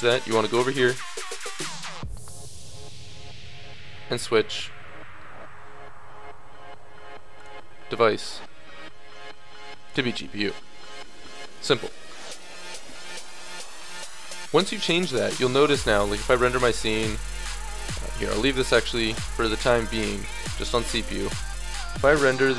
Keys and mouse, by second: 7.4-9.4 drag, 15.4-17.9 middle drag, 17.9-19.8 drag, 20.1-21.9 drag, 22.1 click.